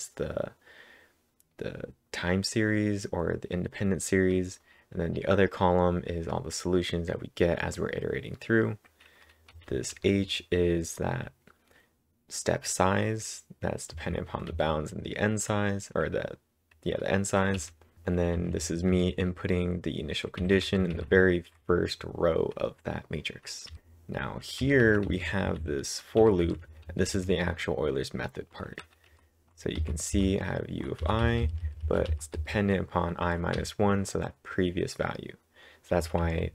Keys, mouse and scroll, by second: 9.5 typing, 13.9 typing, 17.6 typing, 20.4-21.2 typing, 23.7 typing, 26.2-27.6 typing, 28.8-30.3 typing, 31.6-32.4 typing, 36.0 typing.